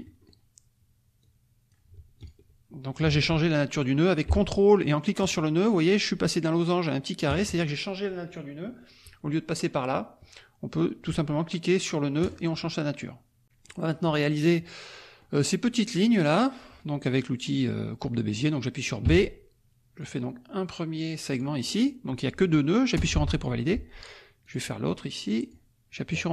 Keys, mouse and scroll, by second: 1.2 click, 2.1 ctrl+click, 3.1 ctrl+z, 5.2 ctrl+click, 12.2 ctrl+click, 13.4 click, 14.9 click, 18.6 click, 19.0 b, 20.0 click, 21.2 click, 22.9 Return, 24.4 click, 25.4 click.